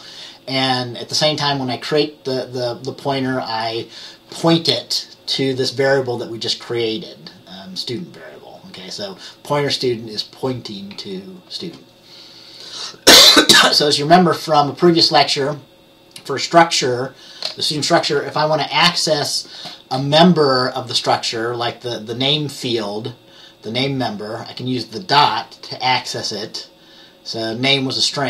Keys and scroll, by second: 11.0 F10.